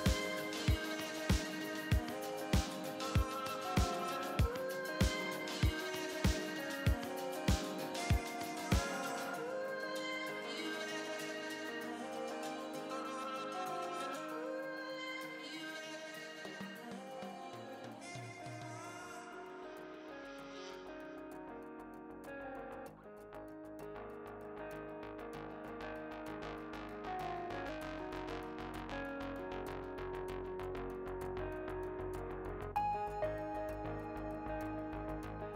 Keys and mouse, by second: 2.7-5.0 drag, 5.6-7.1 drag, 7.1-9.9 middle drag, 14.9-15.9 middle drag, 16.5-17.7 middle drag, 19.9 KP_7, 21.9-23.3 drag, 22.5 shift+a, 25.1 middle click, 27.5 ctrl+z, 28.3 Tab, 29.4 shift+a, 30.9 s, 34.1 Tab, 34.7 right click.